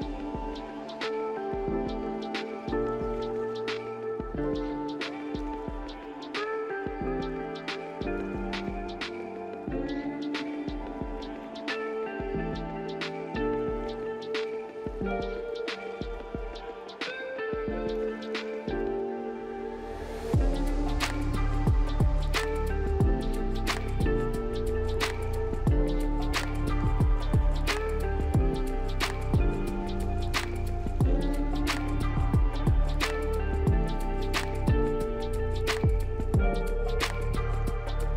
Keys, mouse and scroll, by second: 0.6-1.3 scroll up 4, 1.6 alt+middle click, 5.0 alt+middle click, 15.4 alt+middle click, 34.6 middle click, 35.7 scroll down 1, 35.7-38.1 scroll up 2.